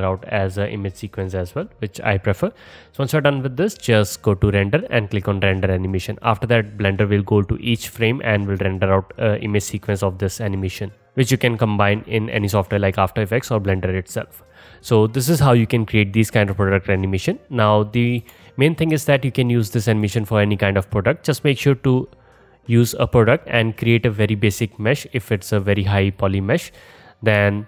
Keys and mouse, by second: 18.2 KP_0, 19.9-21.3 alt+middle drag, 21.3-25.2 drag, 25.2 middle click, 25.3-27.1 drag, 26.2 middle click, 26.2 right click, 27.5-27.6 alt+drag.